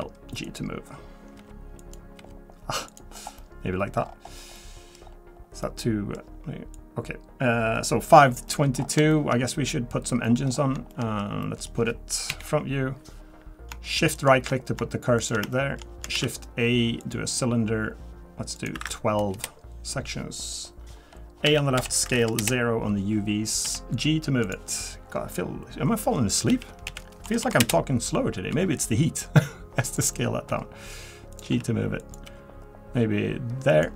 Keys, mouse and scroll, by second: 1.4 g, 3.1 scroll down 3, 3.4 middle click, 4.0-4.4 scroll up 6, 4.5 middle click, 5.0-5.6 scroll down 4, 5.6 middle click, 6.7 click, 8.2 scroll down 2, 8.5 middle click, 8.8-9.3 scroll up 4, 9.1 shift+middle click, 9.7 middle click, 10.2 middle click, 10.3 shift+middle click, 10.5 scroll up 2, 10.9 shift+middle click, 11.4 middle click, 12.3 KP_1, 14.1 shift+right click, 15.2 shift+right click, 15.5 shift+middle click, 16.1 shift+a, 18.5 click, 21.4 a, 21.8 s, 23.6 g, 32.2 g.